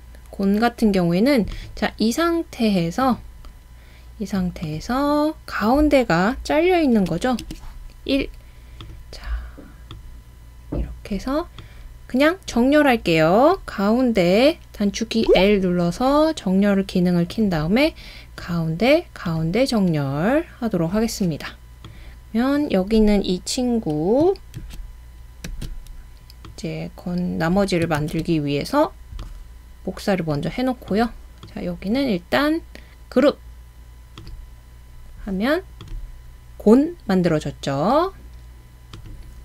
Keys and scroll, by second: 7.0 1, 15.3 |, 24.6 super+c, 25.5 super+v, 28.0 super+v.